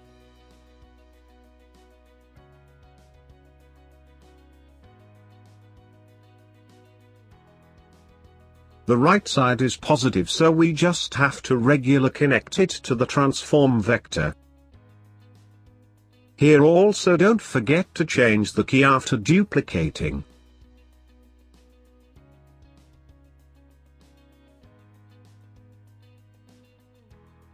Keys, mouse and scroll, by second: 0.5 click, 3.6-4.8 middle drag, 4.9 click, 6.8-7.2 scroll down 3, 7.2 middle click, 7.8-8.2 scroll down 2, 8.3-9.6 middle drag, 9.6 click, 12.4 click, 12.8 click, 13.7 scroll down 2, 13.8 middle click, 14.5 shift+d, 16.6-17.3 scroll up 5, 17.4-18.9 drag, 19.3 scroll down 2, 19.4-21.1 middle drag, 21.1 click, 24.2 click, 27.2 middle click.